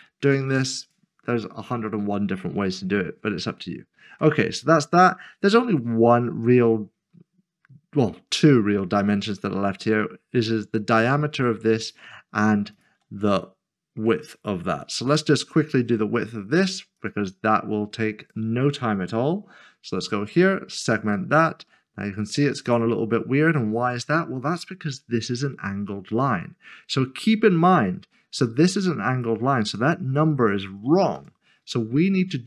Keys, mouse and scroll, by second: 2.9 click, 3.0-3.4 scroll down 1, 6.9-7.7 scroll up 1, 7.7-9.8 scroll down 1, 11.8-12.5 scroll down 1, 13.2 shift+click, 17.0 0, 17.2 click, 19.4 scroll up 1, 20.5 click, 21.4 scroll down 1, 22.7 click, 23.7 click, 24.9 middle click, 31.2 d.